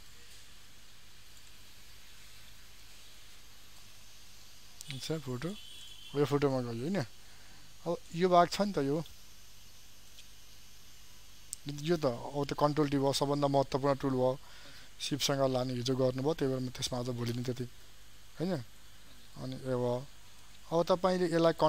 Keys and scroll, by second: 2.3 ctrl+j.